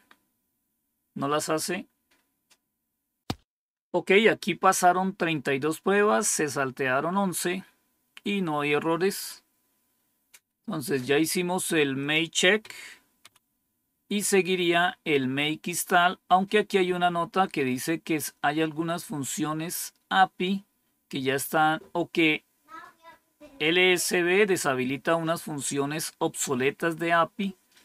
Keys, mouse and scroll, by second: 12.0 click, 12.6 Up, 13.2 Down, 17.5 scroll down 1, 27.4 scroll down 2.